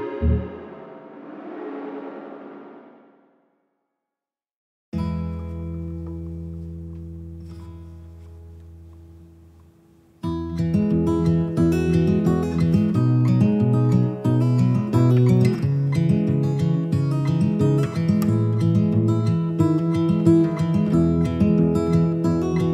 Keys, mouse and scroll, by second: 4.5-20.9 drag, 21.3 click, 21.4-22.7 drag.